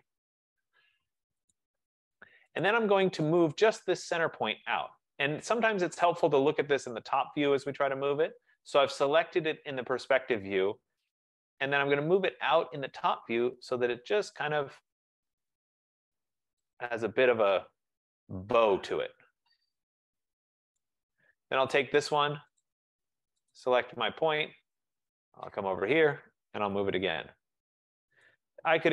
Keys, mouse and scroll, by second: 0.5 click, 1.6 click, 2.8 click, 3.5 click, 6.1 click, 6.7 click, 7.5 middle click, 7.6 middle click, 7.7 middle click, 7.8-8.2 middle click, 8.1 middle click, 8.4 middle click, 9.4 F15, 9.7 middle click, 9.7-10.3 scroll, 11.2 typing, 13.0 click, 13.4-14.2 typing, 16.0-16.8 typing, 16.3-18.7 drag, 20.9 right click, 22.0 click, 22.7 click, 23.6 click, 24.5-25.9 scroll, 25.9 middle click, 26.8 typing, 28.4 click.